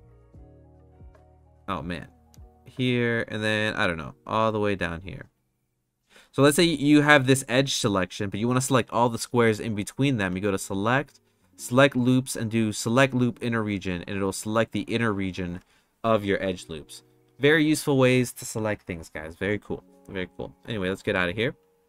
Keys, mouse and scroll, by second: 0.9-2.4 shift+drag, 2.7-4.4 shift+drag, 4.9 shift+click, 5.3-7.2 shift+drag, 10.5-13.6 drag, 20.9 click, 21.8 click.